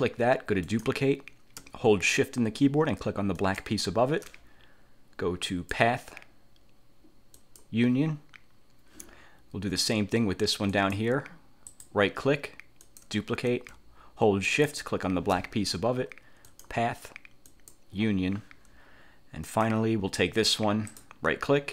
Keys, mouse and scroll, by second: 0.8 click, 3.5 shift+click, 5.6 click, 7.5 click, 10.8 click, 11.8 click, 13.0 click, 14.6 shift+click, 16.6 click, 17.6 click, 19.6 click, 21.0 click.